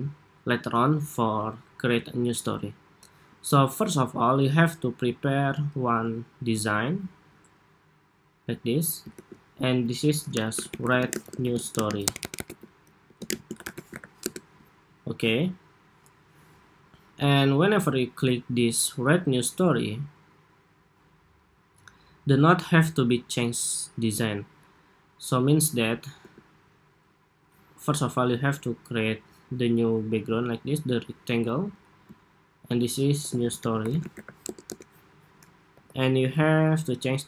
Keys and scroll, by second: 5.5 super+d, 8.8 super+r, 31.0 super+g, 32.5 super+r.